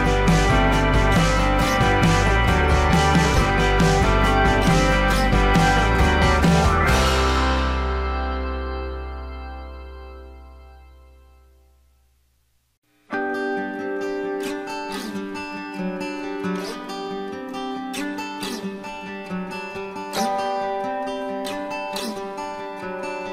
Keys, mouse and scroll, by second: 5.9 ctrl+shift+a, 13.0 Delete, 18.2 alt+scroll up 1, 20.9 shift+click, 21.8 ctrl+z, 22.8 shift+click.